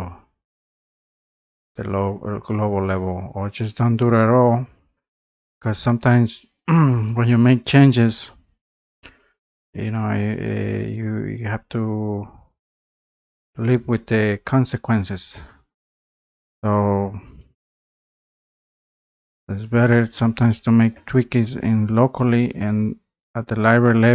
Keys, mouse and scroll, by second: 2.8-7.6 drag, 15.7 click, 18.5 click, 18.9 scroll, 20.1 click, 20.9 click, 21.5 scroll, 21.6 scroll up 6, 22.0 scroll down 2, 23.8 click.